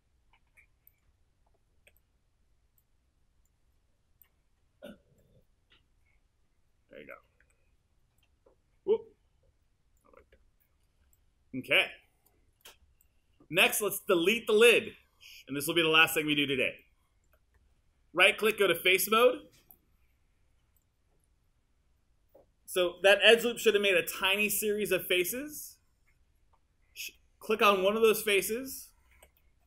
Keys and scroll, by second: 1.9 w, 7.5 r, 29.2 q.